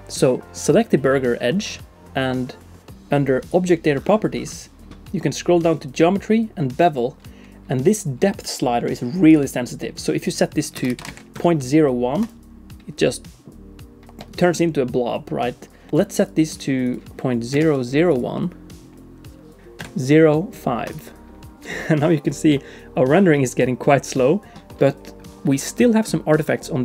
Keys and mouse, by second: 9.4-12.3 drag, 10.9 BackSpace, 14.9-15.9 shift+middle drag, 16.2-18.6 drag, 19.6-21.3 drag.